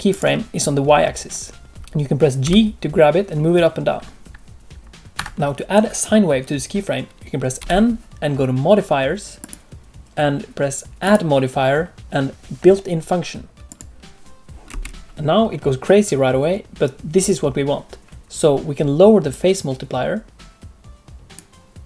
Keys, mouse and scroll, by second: 0.1 click, 1.7 g, 2.4 g, 7.5 n, 9.4 click, 11.0 click, 14.6 space, 19.3 click.